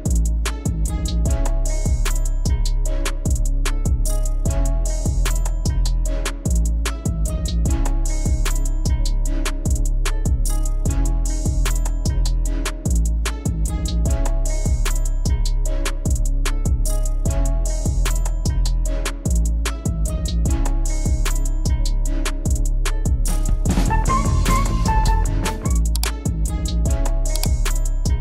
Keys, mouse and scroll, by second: 7.2-7.6 click, 16.5 click, 18.7-20.9 typing, 20.4 click, 22.4 Return, 22.9 click.